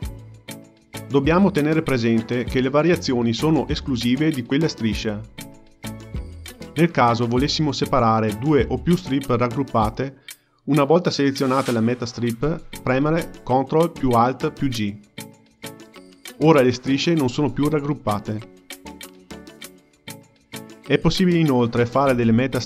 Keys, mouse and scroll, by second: 1.0-3.3 drag, 3.3 Tab, 4.4 click, 4.6 click, 5.5 Tab, 6.0 click, 6.2 Tab, 6.8 Tab, 7.0 click, 7.2 Tab, 7.4 Tab, 7.6 click, 9.0 click, 12.3 ctrl+alt+g, 14.6 click, 15.2-16.8 drag, 17.0-19.5 drag, 20.7 x, 21.4 click, 21.6 x, 22.2 x.